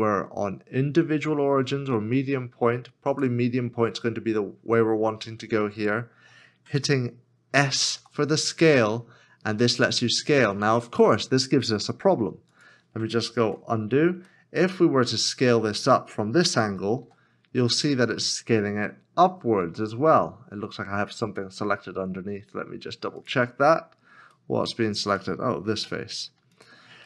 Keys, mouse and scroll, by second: 8.0 s, 13.4 ctrl+z, 13.8 scroll down 1, 14.5 middle click, 17.0 s, 23.7 s, 23.8 scroll down 1, 24.6 middle click, 26.7 shift+click.